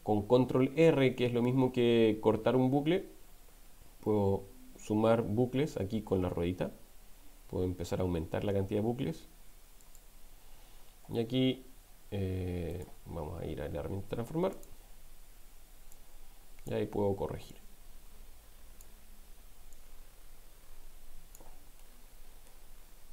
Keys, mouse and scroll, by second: 12.8 right click, 14.5 click, 15.9 click, 17.5-19.1 drag, 19.7-21.3 drag, 21.8 middle click.